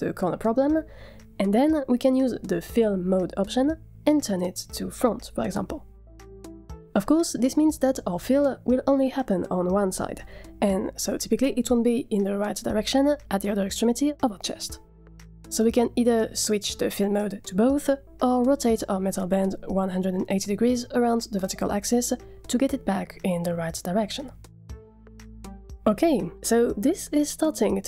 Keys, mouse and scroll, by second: 2.2-7.3 drag, 10.2-12.1 middle drag, 18.3-18.7 drag, 18.7-19.0 middle drag, 19.9 r, 23.9 click, 25.1-26.8 middle drag, 27.6-27.8 middle drag.